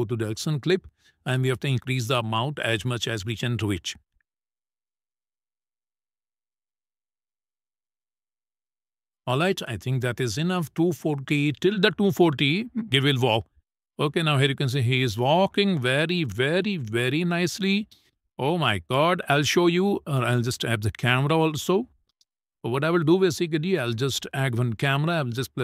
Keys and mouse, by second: 2.2-4.9 drag, 9.8 shift+middle click, 11.7 middle click, 12.5 space, 13.5 shift+middle click, 19.1 space, 20.4 click, 21.0 click, 21.8 shift+middle click, 22.4 middle click, 23.2 middle click, 24.3 shift+middle click, 25.3 shift+a.